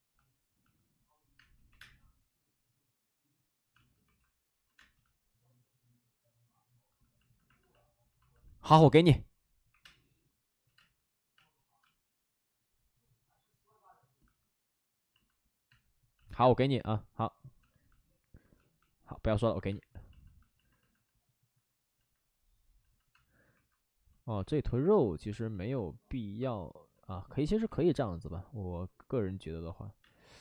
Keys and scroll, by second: 1.3 space, 1.7 2, 1.7 space, 3.7 space, 4.0 1, 4.7 space, 7.6 space, 9.7 5, 9.7 space, 10.3 space, 10.4 space, 19.7 space, 23.1 space, 23.5 1, 27.6 1, 30.0 space.